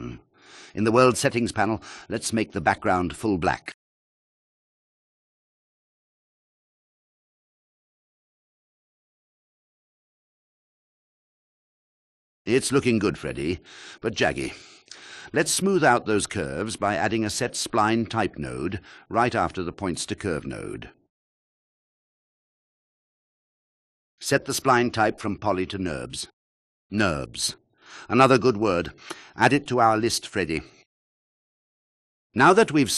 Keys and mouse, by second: 17.2 click, 18.3 shift+a, 24.3-26.3 drag, 30.3 click.